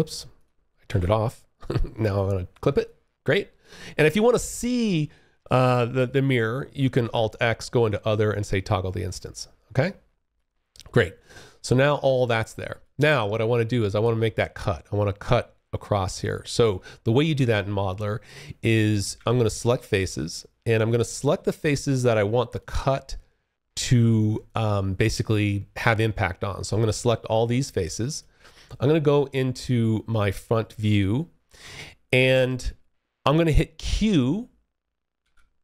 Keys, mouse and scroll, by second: 0.0 alt+x, 1.2 click, 2.0 alt+click, 6.2 alt+x, 7.5 click, 8.2 alt+click, 10.4 alt+click, 11.4 alt+click, 12.2 alt+click, 12.8 alt+middle click, 13.1-13.6 alt+scroll up 1, 19.1 click, 20.0 alt+click, 23.6 alt+click, 26.9 alt+click, 28.1 space, 28.3 3, 34.4 w.